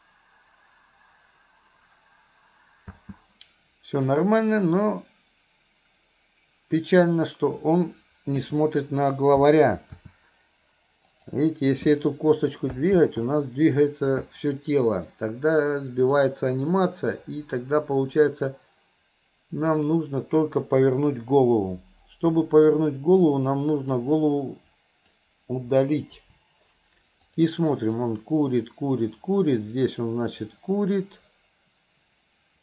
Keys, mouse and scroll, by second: 3.0 space, 6.8 click, 10.0 r, 15.1-16.2 ctrl+middle drag, 19.7 click, 22.9 middle click, 24.0-25.1 drag, 26.2 Delete, 27.4 click, 28.1-32.6 drag.